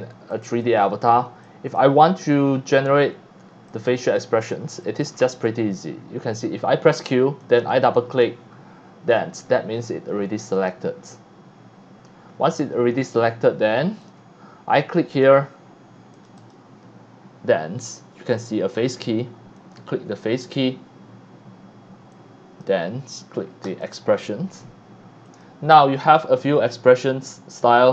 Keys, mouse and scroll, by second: 0.2 x, 0.3 click, 0.8 scroll up 1, 1.4 x, 1.4 click, 1.7 c, 2.0-2.7 drag, 3.6 x, 3.7 click, 4.1-4.5 drag, 4.8 drag, 5.1 scroll down 1, 7.4 click, 7.6 click, 8.2-8.8 scroll up 3, 9.1 scroll down 1, 9.5 scroll up 1, 10.5 click, 12.3-12.8 scroll up 3, 14.0 click, 15.2 click, 16.1 click, 16.4 click, 19.5 click, 22.1 click, 23.6 click, 25.3 click.